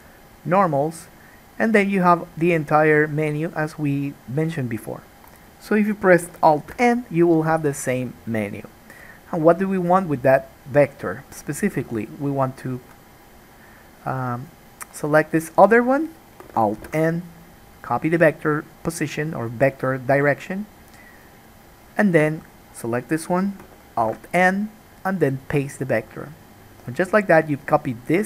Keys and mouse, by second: 6.9 alt+n, 14.6-21.2 middle drag, 17.0 alt+n, 21.2 click, 21.4-28.2 middle drag, 24.1 alt+n.